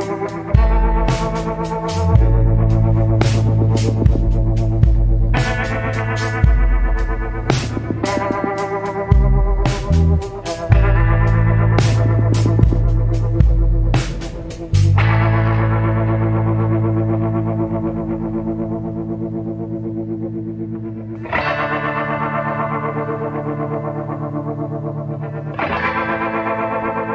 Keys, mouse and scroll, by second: 5.1 scroll down 1, 12.5 scroll down 1, 13.5 scroll up 1, 24.3 scroll up 1, 24.7-25.4 scroll down 1.